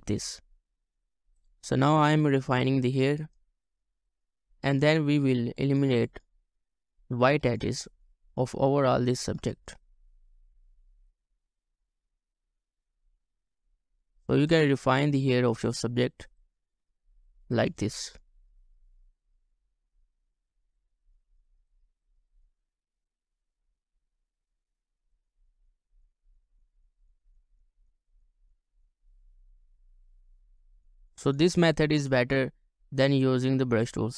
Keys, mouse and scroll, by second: 0.2 scroll up 1, 1.9 double click, 10.1-10.6 ctrl+scroll up 2, 11.7 double click, 22.8 ctrl+scroll up 1, 23.8 double click, 29.2 ctrl+scroll up 1, 29.7 scroll down 1, 30.4 double click.